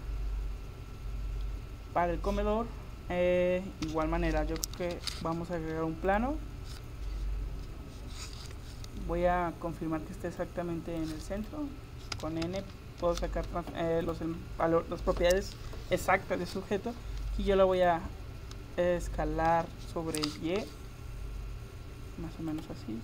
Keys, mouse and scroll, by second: 3.9 KP_7, 4.8 shift+a, 8.4 n, 10.4-19.6 drag, 19.6 s.